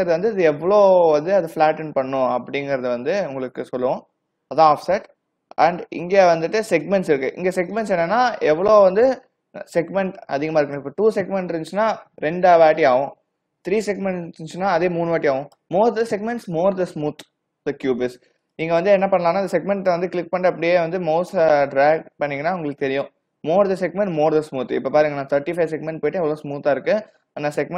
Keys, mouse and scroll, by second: 7.8 click, 12.9 click, 15.5 click, 20.1 click.